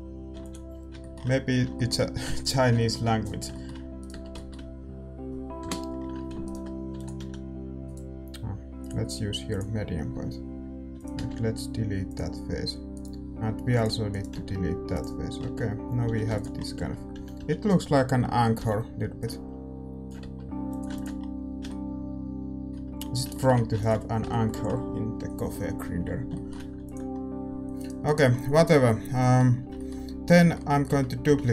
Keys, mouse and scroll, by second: 0.7 ctrl+s, 0.9-6.4 middle drag, 3.9-5.9 right drag, 4.1 Tab, 5.6 KP_7, 6.4-9.5 right drag, 6.9 e, 7.1 s, 9.5-12.1 drag, 10.1 s, 12.1 x, 12.9-16.0 right drag, 13.7-15.6 drag, 14.9 x, 15.3-18.5 middle drag, 15.4 Tab, 16.0 a, 16.5 ctrl+s, 16.7 Tab, 17.1 a, 17.3 a, 18.5 l, 19.1-23.3 drag, 20.2 Tab, 20.3-24.2 middle drag, 21.1 ctrl+s, 24.2 ctrl+s, 28.0-29.7 drag, 30.9 Tab, 31.2 a, 31.4 a.